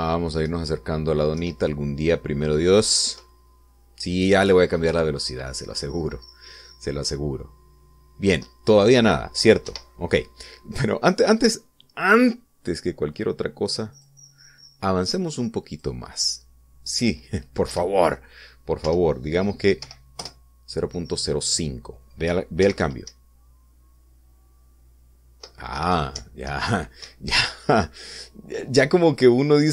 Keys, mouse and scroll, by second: 1.6 Right, 2.5 Left, 4.2 Right, 10.8 Escape, 15.0 click, 16.8 click, 18.8 Right, 20.0 BackSpace, 21.0 5, 21.3 Return, 23.7 p, 24.2 Up, 26.9 Right, 27.3 Up, 28.2 Escape.